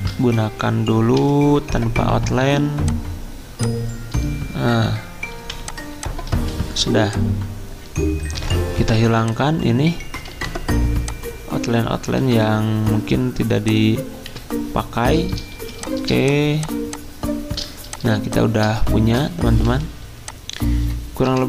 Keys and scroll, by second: 0.0-1.2 typing, 5.3 v, 6.3 ctrl+z, 8.3 Delete, 10.3 Delete, 12.2 Delete, 14.3 Delete, 15.5 z, 21.2-21.4 typing.